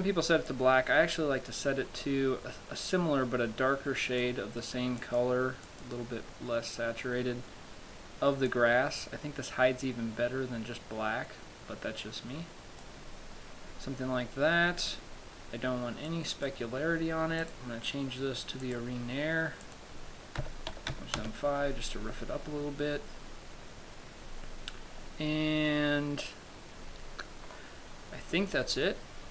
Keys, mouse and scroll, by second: 15.3-15.9 scroll down 2, 16.3 click, 17.7 click, 19.9 click, 22.8-24.4 scroll down 2, 24.4 scroll down 1, 25.3 scroll down 7, 27.0-27.3 scroll down 7, 27.7-29.3 scroll up 16.